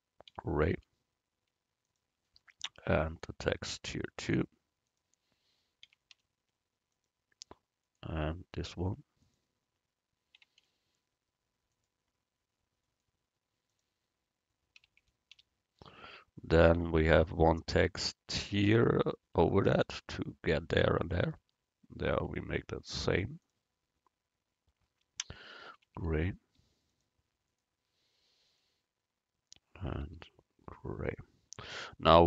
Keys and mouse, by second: 3.2-4.9 right drag, 4.9-6.8 drag, 7.9-10.0 right drag, 9.3-11.1 drag, 13.7-15.6 drag, 13.7-15.3 right drag, 19.1 middle click, 22.1-23.5 right drag, 23.5-25.1 middle drag, 25.1 click, 27.6 right click, 28.5-30.4 middle drag.